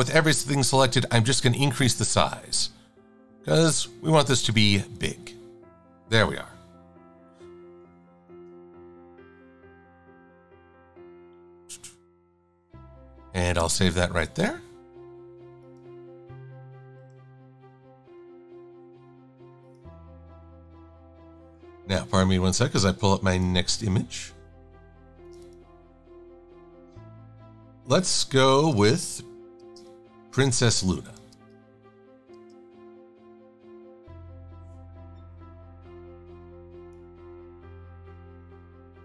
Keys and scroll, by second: 8.1 super+s, 13.6 KP_Enter, 20.3 super+n, 28.9 space, 31.4 space.